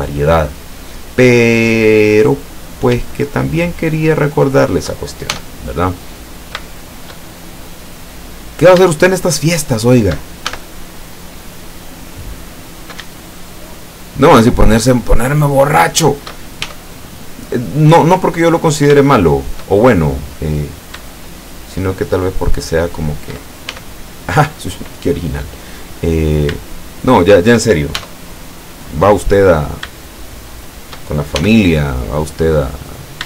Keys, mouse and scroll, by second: 2.7 right click, 3.1 shift+right click, 3.5 shift+right click, 3.9 shift+right click, 4.3 shift+right click, 4.8 shift+right click, 5.4 shift+e, 6.3 shift+click, 6.7-7.3 shift+middle drag, 7.5-7.8 shift+scroll up 1, 8.6 shift+right click, 9.0 shift+right click, 9.5 shift+right click, 10.5 shift+e, 11.7 click, 12.8 right click, 13.3 shift+right click, 13.7-14.3 shift+right drag, 14.6 shift+right click, 15.1 shift+right click, 15.5 shift+right click, 15.9 shift+right click, 16.7 shift+e, 18.4 click, 19.2-19.8 shift+middle drag, 20.7 shift+right click, 21.9 shift+right click, 23.8 shift+e, 25.0 click, 26.3 shift+right click, 26.6 shift+right click, 28.0 shift+e, 28.8 click, 29.7 shift+right click, 30.4 shift+right click, 31.4 shift+e, 32.3 click.